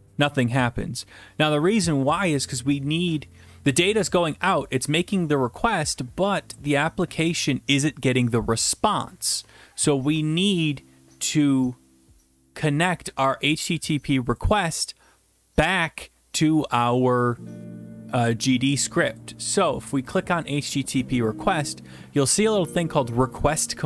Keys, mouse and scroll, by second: 19.2 click, 20.3 click, 22.3 click.